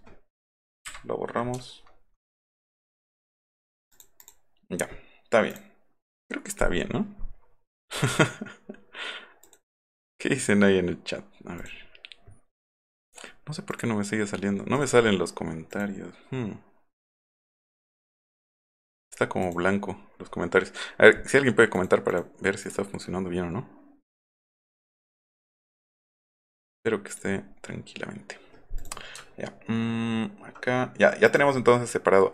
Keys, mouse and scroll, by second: 0.9 Delete, 1.6 alt+scroll up 2, 2.7 alt+scroll up 2, 3.1 alt+scroll down 2, 3.9 click, 7.1 middle click, 7.4 middle click, 9.4 click, 12.6 middle click, 12.9 middle click, 13.7 click, 14.4 scroll up 1, 14.8 click, 14.9 scroll up 1, 15.7 click, 17.6 click, 18.3 click, 18.6 click, 19.4 click, 21.8 click, 22.1 click, 22.7 click, 23.3 middle click, 23.9 middle click, 24.1 middle click, 24.4 click, 25.9 click, 27.1 click, 27.4 middle click, 29.2 alt+middle click, 31.3 click.